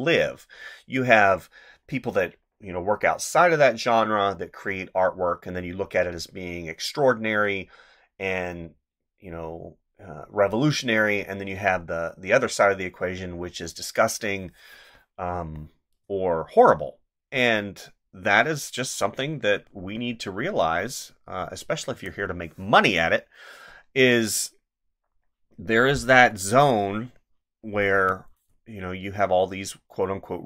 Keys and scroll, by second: 15.3 space, 21.9 space, 27.9 space.